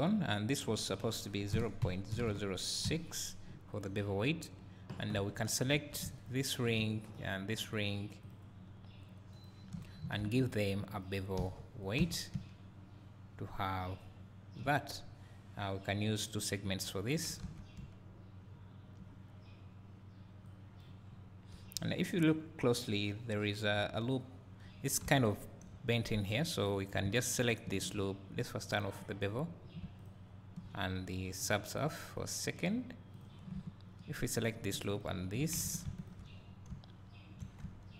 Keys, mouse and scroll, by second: 5.3-12.1 right drag, 5.8 2, 6.3 alt+click, 7.2 alt+shift+click, 11.0 ctrl+e, 12.1-12.8 drag, 12.3 `, 16.4-17.8 drag, 20.5 click, 21.1 scroll up 1, 25.1 Tab, 25.3-25.7 scroll up 1, 25.7 `, 27.0 click, 29.0-30.1 drag, 33.1 click, 34.3 alt+click, 35.0 alt+shift+click, 35.7 ctrl+z, 36.1 alt+shift+click, 36.4 scroll down 1, 36.7 `.